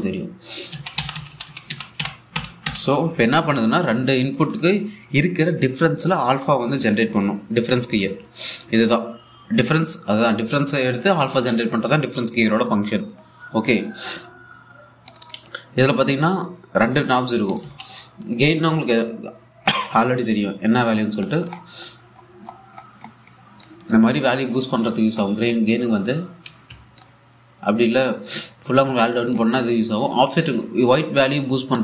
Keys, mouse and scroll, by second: 0.5 click, 1.4 a, 2.7 typing, 4.0 typing, 15.8 click, 18.2 click, 18.3 a, 21.9 click, 22.5-23.4 scroll up 1, 23.7-24.2 scroll up 1, 24.2 click, 27.1 ctrl+Num_Lock, 27.1-27.4 scroll up 1, 27.6-31.0 drag.